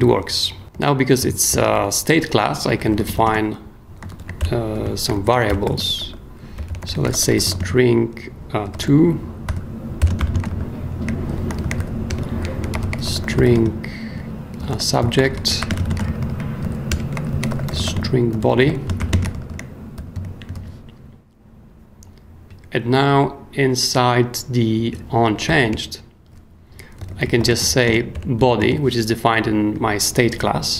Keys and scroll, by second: 0.7 super+o, 1.2 super+o, 1.5 super+k, 1.7-3.6 typing, 4.0 alt+shift+space, 4.1 alt+shift+Left, 4.4 alt+shift+BackSpace, 5.1 alt+shift+Left, 5.4-10.5 typing, 11.8-19.9 typing, 12.1 Return, 16.9 Return, 20.2 super+Escape, 20.5 super+s, 25.5 i, 25.7 Return, 26.7-28.6 typing, 30.6-30.7 typing.